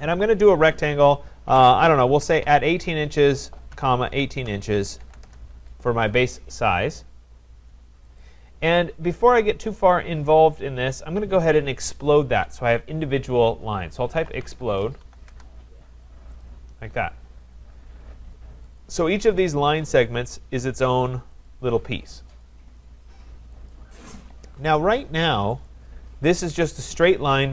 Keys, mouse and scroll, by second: 1.5-5.5 typing, 8.2 click, 10.1-13.3 drag, 13.9-15.5 typing, 16.4-18.8 drag, 18.8 typing, 19.9 click, 20.8 click, 21.5 click, 22.4 click, 23.7 click, 25.6 click.